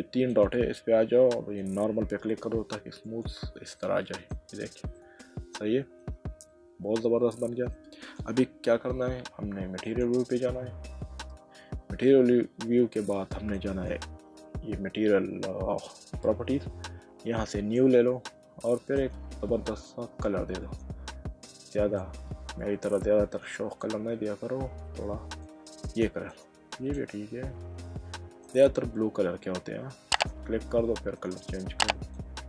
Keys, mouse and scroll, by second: 0.3 click, 1.6 click, 3.0 click, 3.8 middle click, 4.5 click, 4.9 middle click, 6.5 middle click, 8.0 click, 9.8 click, 13.5 click, 17.5 click, 19.0 click, 22.0 click, 23.8 click, 25.4 click, 28.1 middle click, 30.1 click.